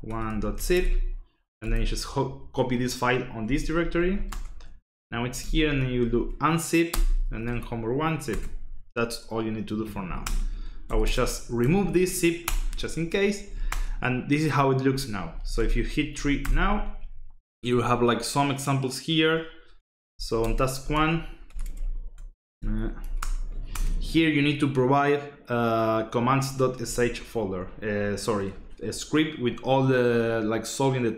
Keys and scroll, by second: 0.0-1.6 typing, 3.4 Return, 3.8-7.8 typing, 8.3 Return, 9.8-12.0 typing, 12.4 Return, 13.2-16.6 typing, 19.8-21.4 typing, 21.7 Tab, 22.9-24.1 typing, 23.0 Tab, 23.2 Return.